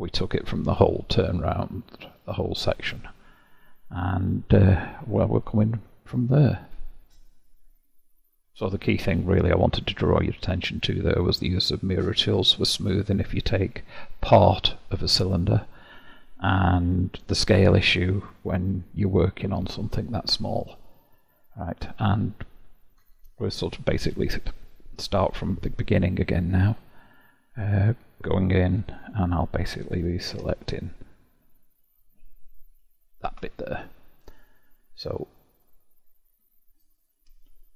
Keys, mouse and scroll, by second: 2.1 click, 9.5-10.4 middle drag, 10.4-12.9 scroll up 1, 12.9-13.5 scroll up 1, 14.1-18.9 middle drag, 22.5-23.5 scroll up 1, 23.5-25.6 scroll up 1, 28.9 Tab, 30.4 3, 32.7 alt+click.